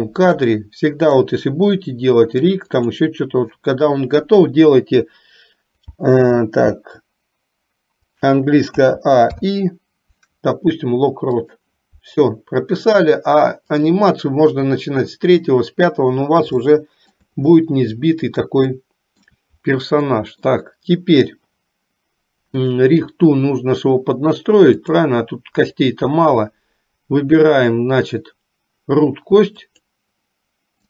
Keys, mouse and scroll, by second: 0.5 middle click, 3.0 click, 13.9 click, 16.8 shift+middle click, 18.9 shift+middle click, 20.2 middle click, 22.8 click, 25.0-29.9 drag.